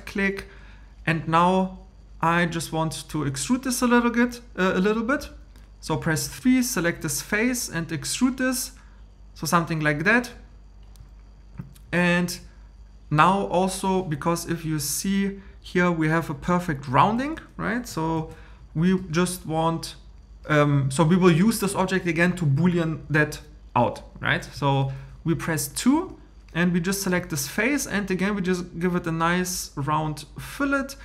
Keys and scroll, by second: 18.2 super+m.